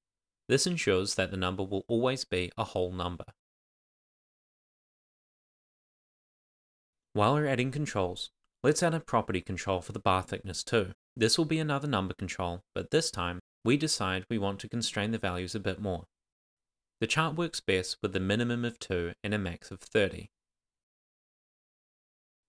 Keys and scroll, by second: 0.4 shift+;, 0.9 super+s, 4.5 super+a, 4.8 Tab, 6.6 Tab, 7.2 Return, 8.2 shift+;, 8.8 shift+;, 9.3 shift+c, 10.8 Tab, 11.3 shift+n, 11.5 Tab, 12.3 Return, 15.3 Return, 16.6 Return, 18.6 Return, 19.3 Up.